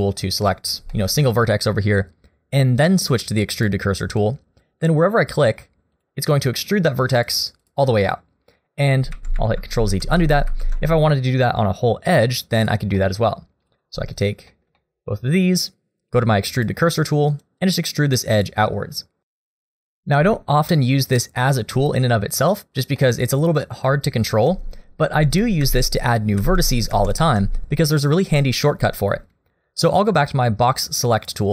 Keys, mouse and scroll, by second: 0.5 middle click, 0.9 shift+middle click, 1.2 middle click, 3.6 click, 5.2 click, 6.0 click, 6.6 click, 7.2 click, 7.6 click, 8.0 click, 9.1 ctrl+z, 9.4 ctrl+z, 9.9 ctrl+z, 10.2 ctrl+z, 10.5 ctrl+z, 12.6 click, 13.0 middle click, 13.6 click, 14.5-19.0 shift+click, 14.5 shift+middle click, 14.8 middle click, 16.6 click, 17.4 click, 17.9 click, 18.4 click, 18.8 click, 19.6-21.7 scroll down 1, 23.0 middle click, 24.3 ctrl+z, 25.1 ctrl+z, 25.6 ctrl+z, 26.4 ctrl+z, 26.9 ctrl+z, 31.2 click.